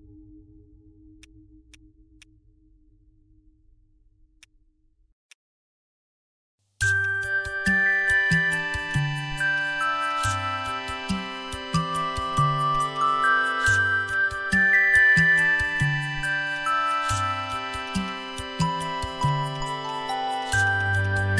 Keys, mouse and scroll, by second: 11.1 ctrl+click, 14.7 shift+click, 16.9 shift+click, 18.1 shift+click, 19.8 shift+click, 20.6 right click.